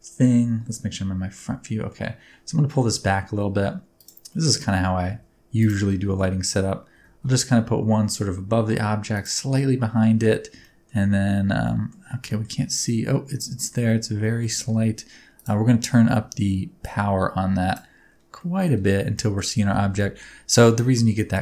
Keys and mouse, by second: 0.2 KP_1, 1.3-1.9 middle drag, 2.8 g, 2.9 middle click, 3.9 click, 4.3 middle click, 4.7 g, 5.0 z, 5.6 click, 5.8 middle click, 6.9 r, 7.2 x, 9.1 click, 9.6 middle click, 10.6-10.9 shift+middle drag, 11.7 middle click, 12.3 shift+middle click, 12.7-13.3 middle drag, 13.6 shift+middle click, 14.4 shift+middle drag, 16.9 click, 18.4 middle click, 19.2 shift+middle click, 20.0 shift+middle click, 21.1 shift+middle click.